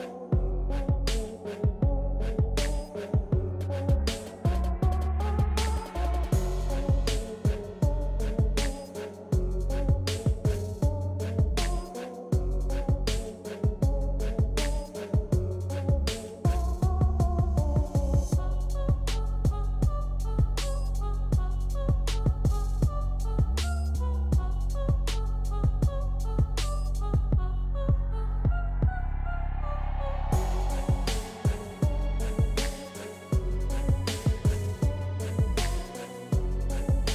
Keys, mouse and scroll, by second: 5.3 z, 9.3-10.0 typing, 9.5-12.0 drag, 12.0 ctrl+z, 13.2 click, 14.0 ctrl+z, 15.3 typing, 21.5-23.8 drag, 23.8 ctrl+scroll up 1, 24.2 ctrl+scroll down 1, 27.5 click, 27.5 typing, 29.7 typing, 31.5-35.7 drag, 31.8 typing.